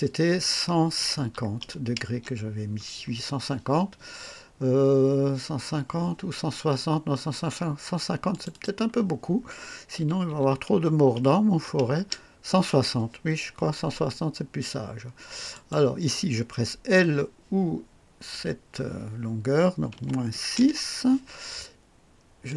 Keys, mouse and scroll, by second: 0.9 KP_1, 1.3 KP_5, 1.6 KP_0, 2.3 Return, 4.2-4.5 scroll up 1, 4.8 scroll down 1, 8.3 click, 9.9 KP_1, 10.3 KP_6, 11.5 KP_0, 11.9 Return, 15.5 click, 18.3 l, 19.9 KP_Subtract, 20.3 KP_6, 20.7 KP_Enter, 22.4 click.